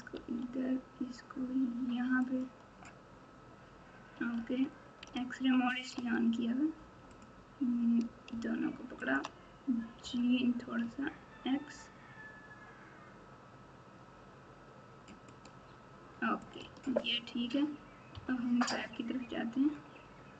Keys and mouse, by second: 0.1 r, 4.3 alt+z, 5.9 alt+z, 10.0 g, 16.4 alt+click, 16.7 alt+z, 18.1 KP_9.